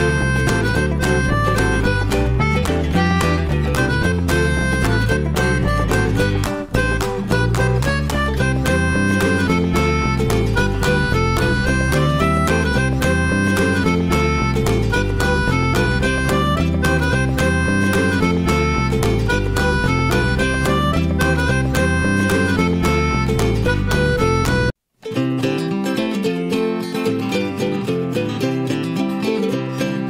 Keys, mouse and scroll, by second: 2.3-4.5 middle drag, 5.0-5.3 scroll down 1, 5.3-6.9 middle drag, 7.9-8.2 middle drag, 8.2 click, 8.5-9.4 middle drag, 11.2 ctrl+shift+x, 12.0 shift+middle click, 12.3-13.1 shift+scroll up 2, 13.1-20.6 shift+middle drag, 20.6 drag, 21.7-25.3 middle drag, 25.5 alt+middle click, 26.8 shift+middle drag, 27.1 click, 27.9 ctrl+shift+x, 29.4-29.9 scroll down 1, 29.9 shift+middle click.